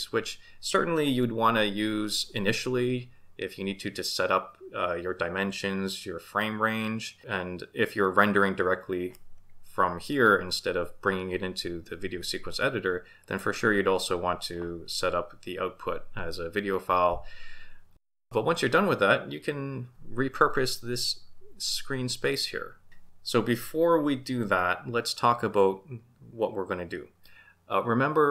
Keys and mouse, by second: 13.3 click.